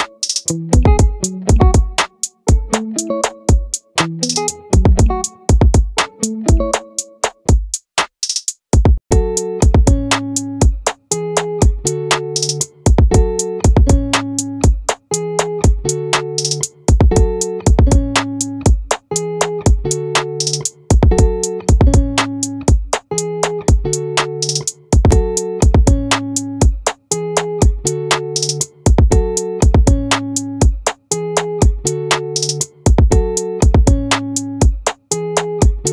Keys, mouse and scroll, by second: 1.6-5.4 middle drag, 7.0-8.4 drag, 9.4-11.0 drag, 14.2-17.6 right drag, 15.8-17.6 drag, 18.6 ctrl+z, 20.0-22.6 right drag, 21.0 click, 28.3-31.9 right drag, 34.5-35.9 right drag.